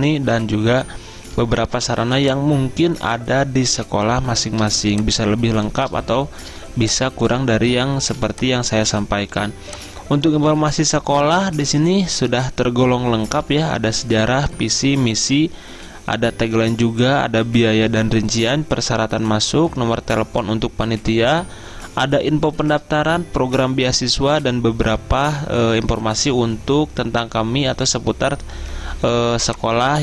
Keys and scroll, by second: 8.1 z, 29.3 z.